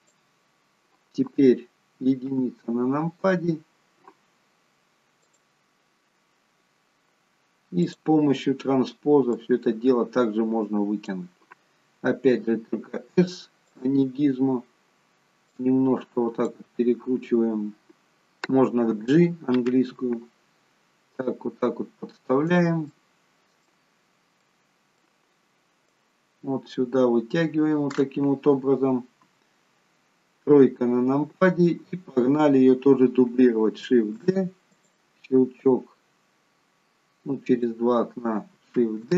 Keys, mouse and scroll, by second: 2.2 KP_1, 3.2 scroll up 5, 5.3 click, 7.7 click, 15.5 click, 19.0 g, 22.8 middle click, 23.8-24.5 scroll down 2, 24.5 middle click, 24.5-25.0 scroll down 2, 25.9 click, 30.3 KP_3, 34.1 shift+d, 35.5 click, 38.8 shift+d.